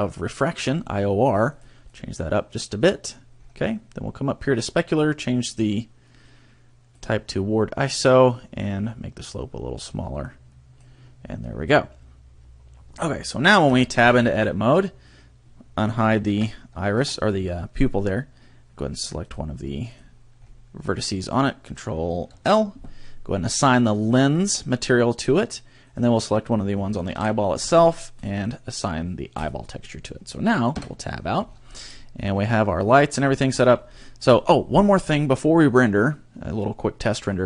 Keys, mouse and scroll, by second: 1.5 click, 1.9 click, 3.4-4.9 scroll up 2, 4.9 click, 4.9 scroll up 1, 5.5 click, 8.9 click, 11.5-12.1 scroll up 3, 13.7 Tab, 16.3 alt+h, 17.0 a, 17.1 middle click, 19.3 click, 19.9 click, 20.3-20.7 scroll up 3, 21.2 right click, 22.3 ctrl+l, 24.1 click, 25.9 right click, 27.1 ctrl+l, 28.2 click, 29.4 click, 30.2-30.6 scroll down 2, 30.7 Tab, 31.1-31.9 scroll down 11, 31.9 middle click, 32.7 scroll down 2, 33.0 middle click, 33.5-34.3 scroll up 11.